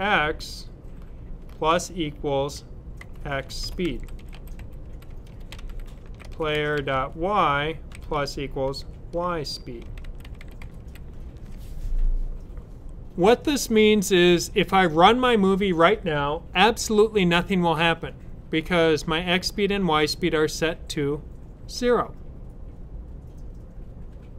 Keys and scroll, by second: 0.0-0.1 typing, 1.3-1.6 typing, 2.9-11.2 typing.